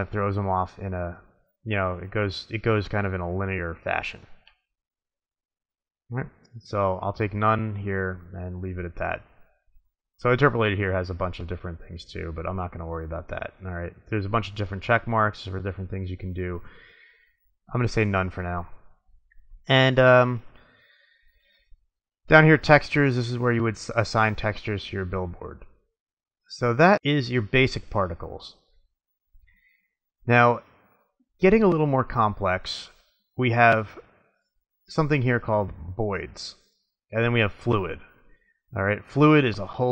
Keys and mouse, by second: 6.2 click, 8.7-10.6 drag, 13.3-14.2 drag, 16.9-18.2 drag, 18.7-20.2 middle drag, 21.6-23.4 drag, 23.4-24.5 middle drag, 25.5-26.3 drag, 26.3 middle click.